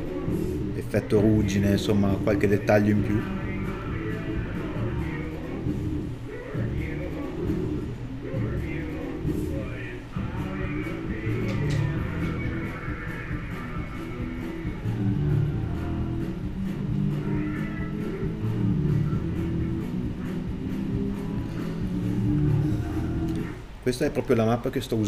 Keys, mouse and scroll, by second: 2.0 middle click, 2.5 middle click, 3.1 middle click, 4.1 alt+right click, 4.7 z, 5.0 middle click, 5.1 scroll up 1, 5.4 alt+right click, 5.6 z, 7.7 middle click, 8.2 scroll down 1, 8.3 middle click, 9.9 z, 10.4 middle click, 11.0 middle click, 13.5 middle click, 13.9 scroll up 1, 15.1 scroll down 1, 15.3 middle click, 17.1 middle click, 18.3 middle click, 19.7 KP_Divide, 20.0 middle click, 20.3-20.9 scroll down 1, 21.1 click, 21.3 scroll up 1.